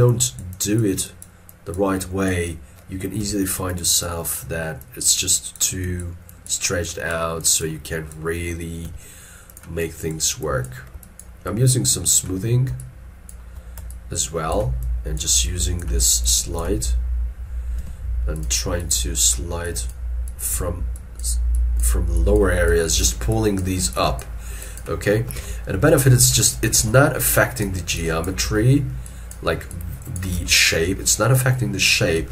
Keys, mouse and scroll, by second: 0.2 double click, 3.3 f, 4.1 double click, 8.9 f, 9.9 double click, 11.0 double click, 11.1 shift+click, 11.6 shift+click, 12.9 shift+click, 14.0 shift+click, 17.9 f, 18.9 double click, 22.8 double click, 25.5 alt+e, 26.4 alt+e, 26.9 alt+e, 28.6 alt+e, 30.4 alt+e.